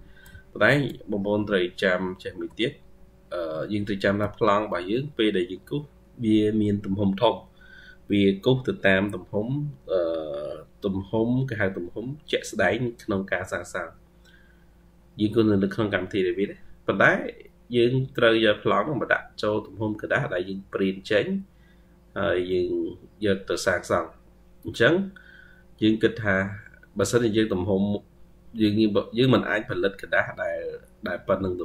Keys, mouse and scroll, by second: 0.3 ctrl+scroll, 0.3 ctrl+scroll down 1, 0.8-1.1 scroll up 2, 1.1 scroll down 1, 1.8 ctrl+scroll down 1, 3.5 ctrl+scroll down 2, 4.3-4.6 ctrl+scroll down 2, 4.6-6.4 scroll up 24.